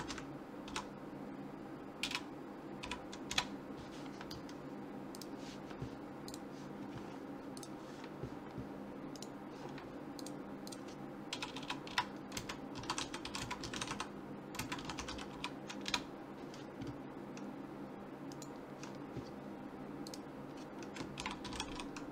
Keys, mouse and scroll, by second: 7.6-9.4 drag, 9.3-11.0 right drag, 10.2 click, 11.5 BackSpace, 11.6 BackSpace, 18.3-20.1 right drag, 20.1-21.9 drag.